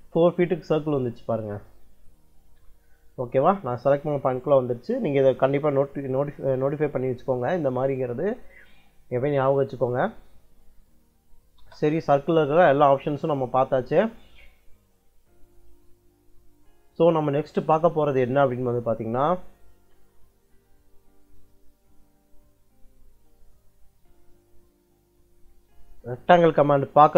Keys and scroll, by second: 11.0 c, 11.5 space, 19.1 Escape.